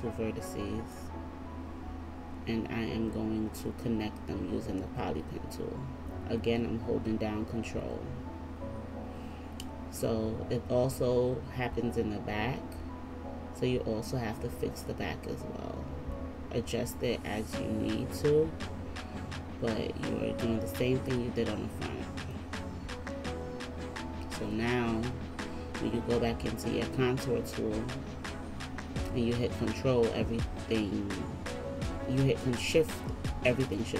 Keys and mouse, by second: 5.4-8.1 ctrl+middle drag, 5.4-8.1 ctrl+right drag, 20.8-23.4 ctrl+middle drag, 20.8-23.4 ctrl+right drag.